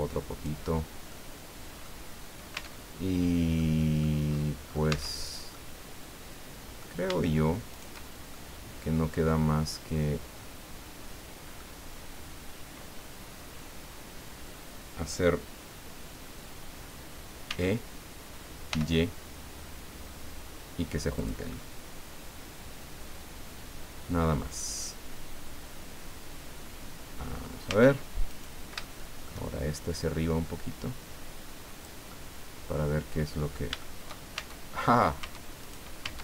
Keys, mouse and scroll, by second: 0.7 scroll down 2, 1.1 click, 2.1-2.4 scroll down 2, 2.5 Tab, 2.9-3.3 scroll down 1, 3.6 click, 4.2-4.9 scroll up 2, 4.9 Tab, 5.5-7.0 drag, 7.7 shift+right click, 8.3-11.7 shift+drag, 17.5 e, 18.7 y, 21.2 click, 21.5-27.6 middle drag, 27.6 Tab, 28.3 right click, 28.8 shift+middle click, 30.0-32.0 drag, 32.1-33.7 middle drag, 34.0 shift+middle click, 34.4 shift+Tab, 35.2 Tab, 35.6 right click, 36.0 Tab.